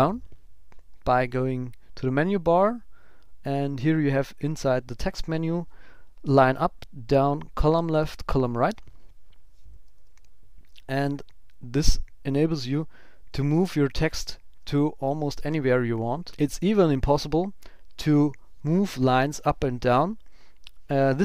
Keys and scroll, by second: 11.7 ctrl+super+Right, 13.2 ctrl+super+Left, 14.6 Right, 15.9 super+Left, 16.2 Down, 18.9 shift+super+l.